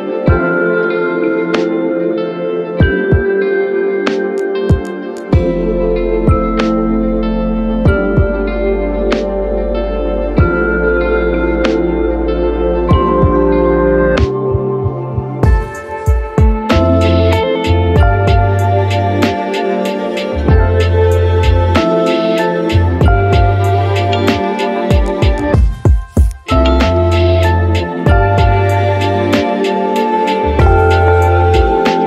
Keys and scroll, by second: 2.3 ctrl+z, 2.9 z, 3.6 ctrl+z, 5.1 ctrl+z, 6.3 ctrl+z, 6.9 z, 26.2 Delete.